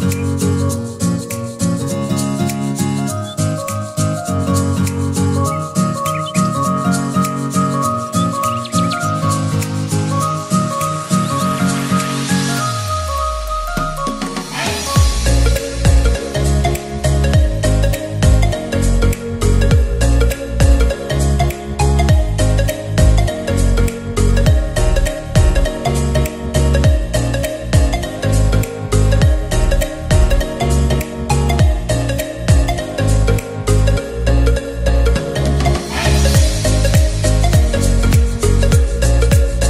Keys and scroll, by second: 13.2 ctrl+t, 39.2 m, 39.4 o.